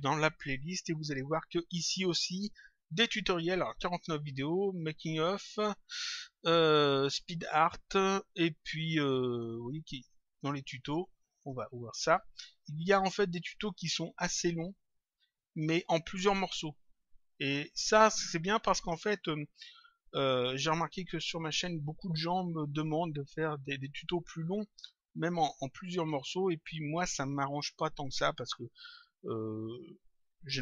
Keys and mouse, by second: 10.6 click.